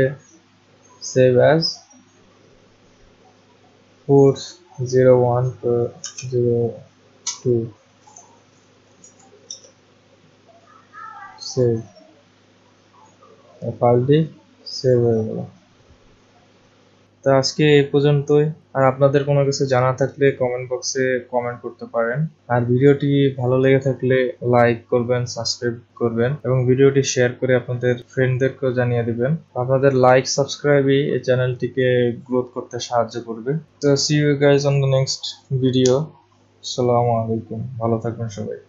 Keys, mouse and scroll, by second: 1.1 click, 4.5 click, 5.9 BackSpace, 7.0-7.7 typing, 9.0 Left, 9.5 BackSpace, 11.6 click, 15.1 click.